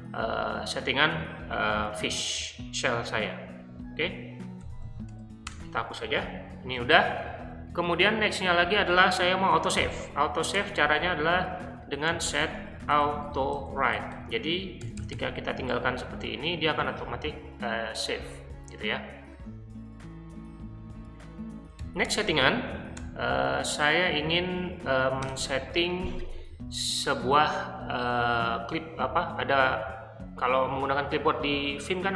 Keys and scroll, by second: 4.3-5.6 typing, 9.8 o, 10.5 Return, 11.9-15.3 typing, 21.8 typing, 22.9 Return, 25.2 BackSpace.